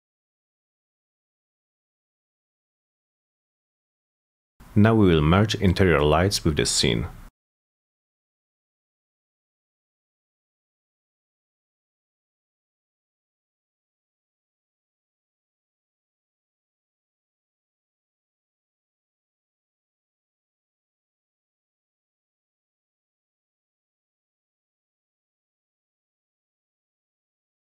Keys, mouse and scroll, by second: 0.9-1.3 scroll up 4, 1.5-1.9 middle drag, 1.9 scroll up 2, 2.0 middle click, 2.2-2.6 middle drag, 4.2 click, 5.3 click, 6.6 click, 8.3 ctrl+v, 9.3 Return, 10.8 click, 11.0 click, 12.7 click, 14.2 click, 14.4 click, 16.6 click, 17.8 click, 19.8 middle drag, 20.2 middle click, 20.4 F4, 20.7 middle click, 20.9 middle click, 21.1 F3, 21.3 middle drag, 21.7 middle click, 22.5 middle click, 23.0 middle click, 23.9 scroll up 1, 24.1 middle click, 24.5 F3, 24.8 middle click, 25.3 c, 26.3 click, 26.7 click, 27.0 F4.